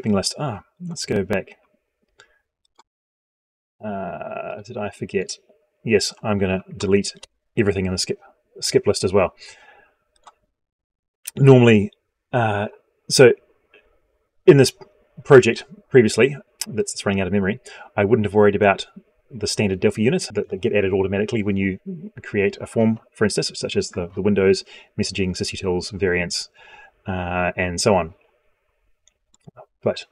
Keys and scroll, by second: 6.6 ctrl+a.